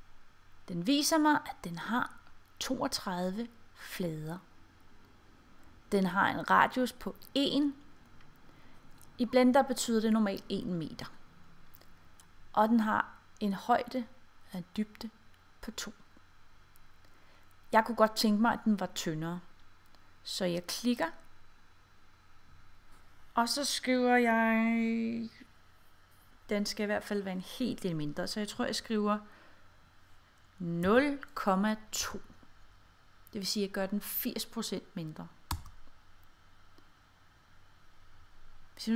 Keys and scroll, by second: 31.0 ■, 31.1 ., 32.1 2, 35.6 Return.